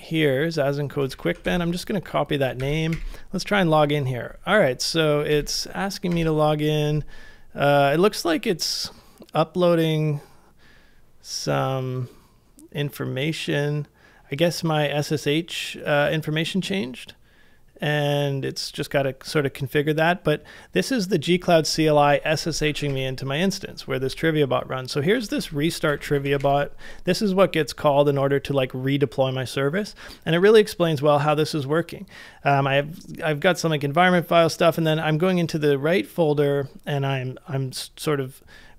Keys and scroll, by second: 1.1 super+c, 1.4 super+Tab, 2.6 super+v, 2.9 Return, 5.3 Return, 22.4-23.2 typing, 25.3 super+c, 25.4-26.4 typing, 26.4 Return.